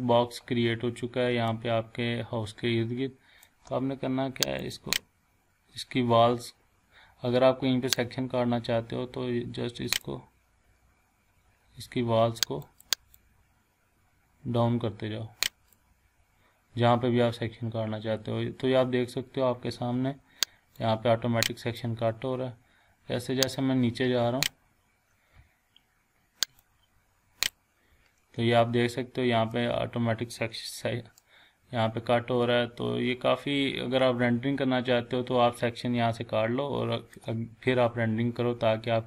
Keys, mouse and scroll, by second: 1.5-3.7 shift+middle drag, 4.6 click, 8.0-10.1 drag, 12.6-15.9 drag, 20.8-22.0 drag, 29.5-30.5 ctrl+middle drag, 31.2-37.4 shift+middle drag, 37.6 scroll down 1, 38.3 scroll up 1.